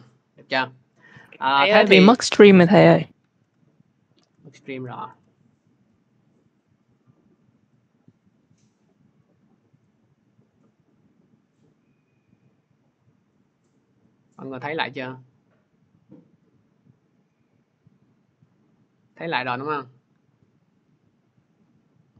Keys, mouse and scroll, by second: 0.6 click, 3.2 alt+Tab, 4.0 alt+Tab, 4.3 alt+Tab, 4.6 alt+Tab, 4.9 alt+Tab, 7.7 click, 9.2 click, 9.8 click, 11.5 click, 18.5 scroll, 19.6 click.